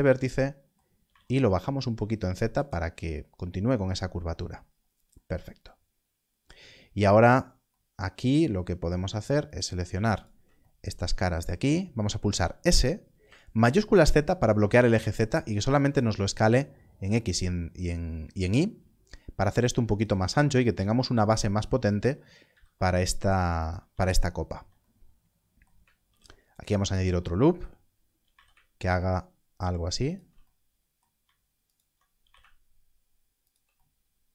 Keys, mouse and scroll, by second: 1.0 z, 2.5 click, 3.4 scroll down 1, 6.7-8.9 scroll down 1, 9.4 alt+click, 10.1 alt+shift+click, 12.2 s, 13.5 shift+z, 21.9 alt+click, 22.4 s, 23.6 click, 26.0 ctrl+r, 26.8 right click, 28.2 z, 30.0 shift+click, 31.6 alt+click, 32.1 g, 32.2 z, 33.4 shift+click.